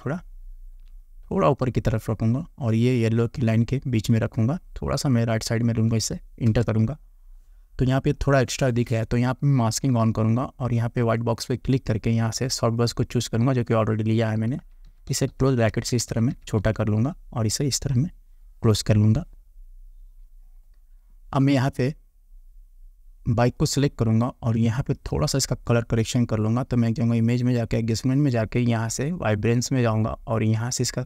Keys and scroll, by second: 6.5 Return, 14.6 [.